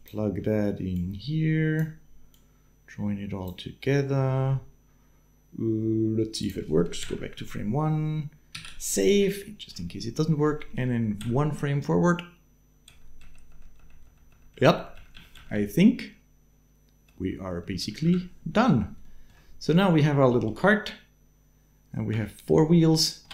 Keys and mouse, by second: 2.1-3.2 drag, 6.8 shift+Left, 8.4 ctrl+s, 9.2 shift+middle click, 11.0 Right, 12.7 Right, 13.0 Right, 13.6 Right, 13.8 Right, 14.1 Right, 14.3 Right, 14.6 Right, 14.7 Right, 14.9 Right, 15.1 Right, 15.3 Right, 15.8-17.1 Right, 17.3 Right, 17.5 Right, 17.7 Right, 17.8 Right, 18.8 shift+middle click, 20.4 Right, 20.9-22.3 Right, 23.0 space.